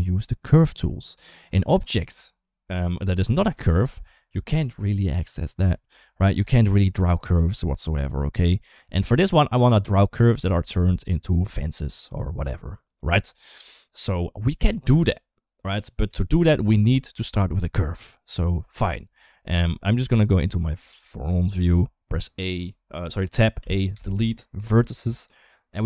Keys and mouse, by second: 0.6 Tab, 1.2 Tab, 6.5 Tab, 7.2 Tab, 14.5 shift+middle drag, 19.8 KP_1, 21.4 Tab, 23.4 a, 23.7 Delete.